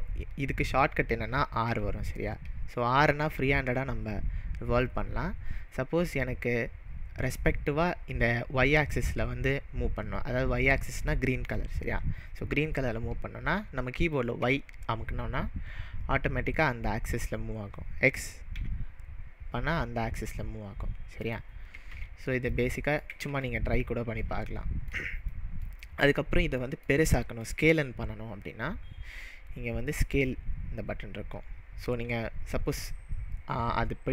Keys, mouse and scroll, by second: 1.7 r, 14.4 y, 18.6 x, 21.2 click, 21.9 ctrl+z, 22.6-23.4 middle drag, 23.3 ctrl+z, 24.6-30.2 shift+middle drag, 30.2-34.1 drag.